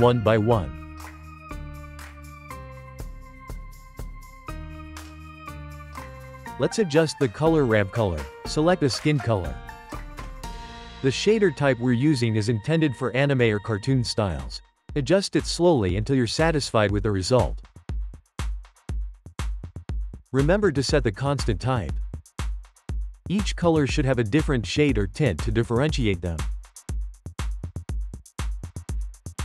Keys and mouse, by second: 0.3-1.0 shift+middle drag, 1.0 click, 1.8-2.5 shift+middle drag, 2.5 click, 3.5-6.0 ctrl+middle drag, 6.4-6.9 drag, 10.3-12.7 drag, 12.7-14.0 ctrl+middle drag, 14.0-18.3 drag, 20.0 click, 22.1-24.3 shift+middle drag, 24.3-26.2 drag, 27.3-28.5 drag, 29.3-29.4 drag.